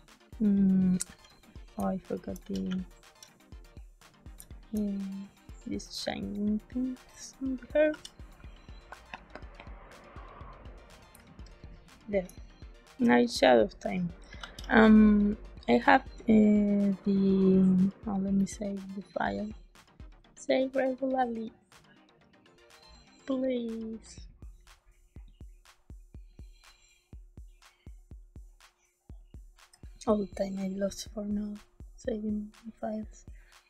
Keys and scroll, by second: 1.0 b, 1.7 ctrl+space, 2.3 b, 4.3 space, 7.8 z, 11.0 space, 14.3 ctrl+s.